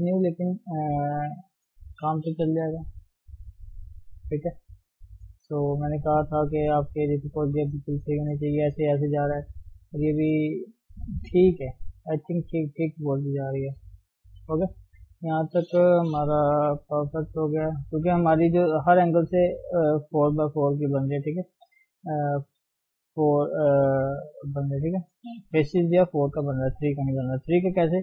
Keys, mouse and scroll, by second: 1.0-2.6 scroll down 1, 2.6 g, 4.2 click, 4.5 g, 5.3 scroll down 1, 5.5-6.5 middle drag, 6.5-7.4 scroll up 2, 6.8 shift+middle click, 7.6-11.5 middle drag, 11.5 scroll down 2, 11.8-12.9 middle drag, 12.9 scroll up 1, 13.5 KP_1, 14.3 KP_3, 15.5 click, 16.2 g, 17.4 click, 17.8 g, 19.3 click, 20.3 KP_1, 21.7 g, 22.8 click, 23.5 click, 24.0 g, 25.4 click, 25.8 3, 26.1 click.